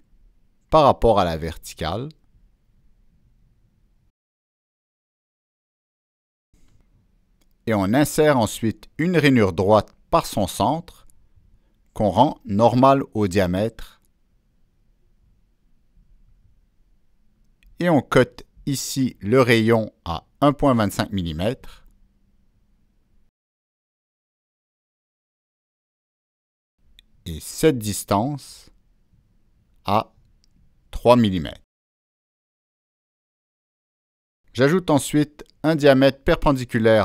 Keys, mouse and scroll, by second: 0.8 click, 2.7 Return, 2.7 click, 5.0 click, 5.2 Escape, 5.2 Return, 8.8 click, 12.5 click, 13.7 click, 14.7 click, 17.8 click, 18.6 click, 19.2 Escape, 20.6 middle click, 20.6 scroll down 1, 22.2 right click, 24.3 click, 25.0 click, 25.0 right click, 26.8 Return, 28.7 Return, 28.7 click, 29.7 click, 29.7 Return, 30.6 click, 31.6 click, 32.7 Return, 36.5 click, 36.6 Return.